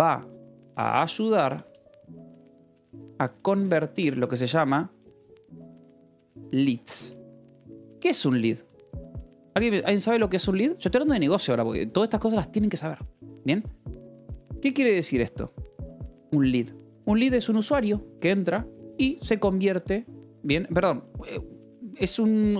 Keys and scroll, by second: 0.0-9.2 typing, 7.5 Escape, 9.5 Escape, 15.3 shift+v, 15.9 Escape.